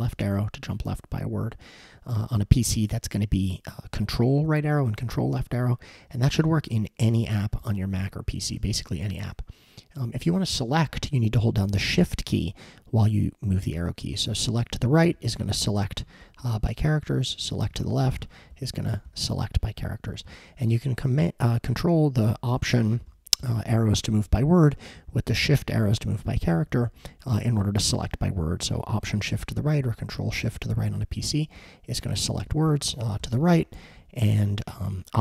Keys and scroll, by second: 0.1 alt+Left, 5.9 alt+Right, 6.5 alt+Right, 7.0 alt+Right, 7.6 alt+Left, 8.0 alt+Left, 8.6 alt+Left, 14.1 shift+Right, 14.3 shift+Right, 14.5 shift+Right, 15.1 Right, 15.8 shift+Right, 16.0 shift+Right, 17.0 Right, 17.4 shift+Left, 17.7 shift+Left, 17.8 shift+Left, 18.5 Left, 19.1 shift+Left, 19.2 shift+Left, 19.4 shift+Left, 20.1 Left, 20.2 Left, 21.9 alt+Right, 22.3 alt+Right, 22.6 alt+Right, 23.1 alt+Left, 23.4 alt+Left, 23.7 alt+Left, 24.0 alt+Right, 24.2 alt+Right, 24.4 alt+Right, 25.0 shift+Left, 25.1 shift+Left, 25.3 shift+Left, 25.9 shift+Right, 26.0 shift+Right, 26.2 shift+Right, 26.6 alt+Left, 26.8 alt+Left, 27.0 alt+Left, 27.6 alt+shift+Right, 31.6 alt+shift+Right, 32.5 alt+shift+Left, 32.7 alt+shift+Left, 33.5 Right, 34.2 alt+Right.